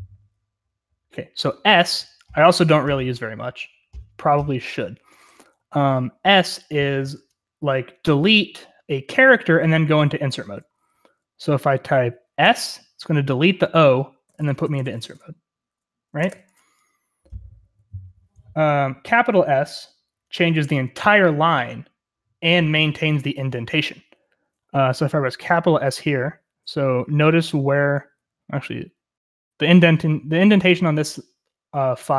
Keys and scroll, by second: 0.0-0.1 typing, 5.0-6.2 typing, 9.7-11.3 typing, 12.4 typing, 14.0-16.3 typing, 16.2 Escape.